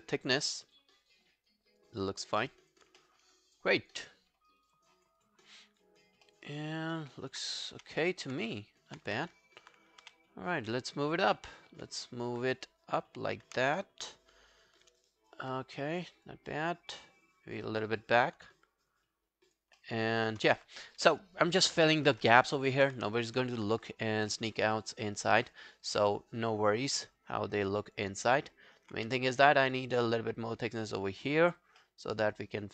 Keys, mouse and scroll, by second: 3.0 alt+middle click, 3.3 alt+scroll down 3, 3.6 alt+click, 4.1-4.6 alt+scroll down 2, 4.6 alt+click, 5.0 alt+scroll up 5, 5.2 alt+click, 6.3 alt+middle click, 6.5 alt+right click, 6.7 alt+click, 7.8 w, 8.1 alt+click, 8.8 alt+click, 9.1 q, 10.0 w, 12.0 alt+click, 13.6 alt+click, 15.0 alt+click, 18.5 alt+click, 19.8 alt+middle click, 20.1 alt+scroll down 1, 20.3 alt+click, 20.9 right click, 23.1 scroll down 2, 23.3 alt+click, 24.1 alt+scroll up 4, 24.3 alt+middle click, 24.6 alt+right click, 24.9 alt+click, 25.5 alt+middle click, 25.7 alt+right click, 25.9 alt+click, 27.3 alt+scroll down 1, 27.5 alt+click, 28.2 alt+scroll up 2, 28.4 alt+middle click, 29.0 q, 29.2 right click, 30.8 double click, 31.2 alt+scroll down 1, 31.4 alt+click, 31.8 alt+middle click, 32.1 alt+right click, 32.3 alt+click.